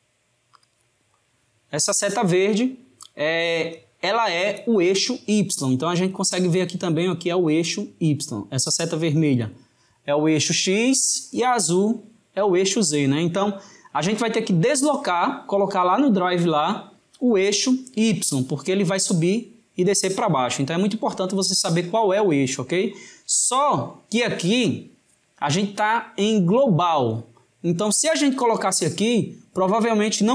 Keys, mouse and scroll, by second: 0.6-3.6 drag.